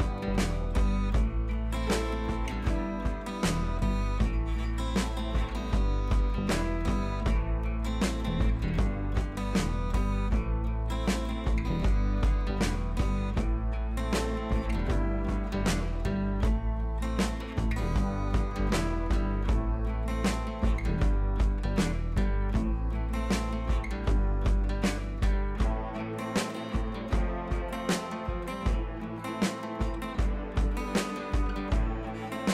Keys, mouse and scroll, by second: 2.9 click, 3.9 ctrl+z, 4.2 click, 9.0-10.0 drag, 17.2-17.7 drag, 23.3-24.1 drag, 25.7-26.1 scroll down 1, 26.2 scroll up 1, 26.7 ctrl+t, 27.3 click, 28.4 shift+click, 28.9 ctrl+t, 29.5-31.9 drag.